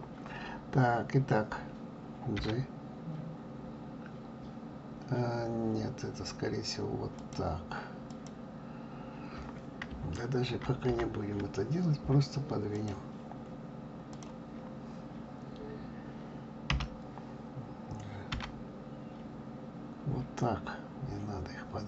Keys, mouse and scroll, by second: 2.3 g, 8.1 click, 10.4 ctrl+z, 10.9 ctrl+z, 12.7 click, 14.1 click, 16.7 l.